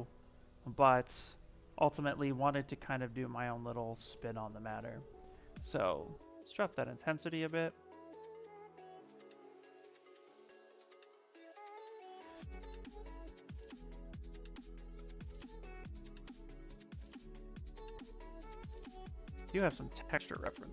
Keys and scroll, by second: 5.3 space, 17.4 alt+Tab.